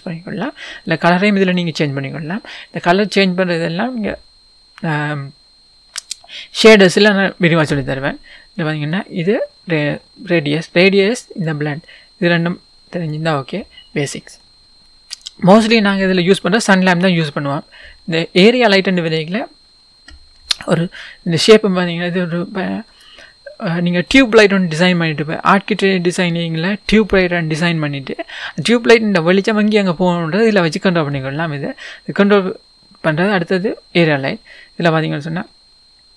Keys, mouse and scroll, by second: 2.3 click, 5.7-7.5 scroll down 1, 9.1-14.4 drag, 14.0-14.3 scroll down 1, 14.3 scroll up 1, 14.4-19.0 middle drag, 19.0 click, 19.6-21.0 scroll down 1, 21.0-21.6 scroll up 1, 24.5-26.0 scroll down 2, 26.0-36.1 middle drag, 27.1-29.4 scroll up 2, 29.4-29.8 scroll up 1, 29.8-30.9 scroll down 2, 30.9-32.1 scroll down 1, 32.1-33.6 scroll down 1, 33.6-34.7 scroll down 1, 34.7-36.1 scroll down 1.